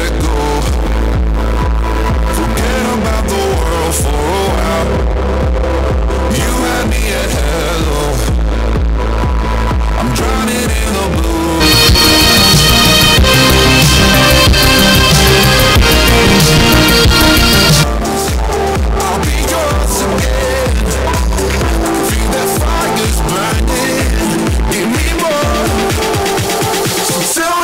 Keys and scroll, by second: 18.5 Page_Down.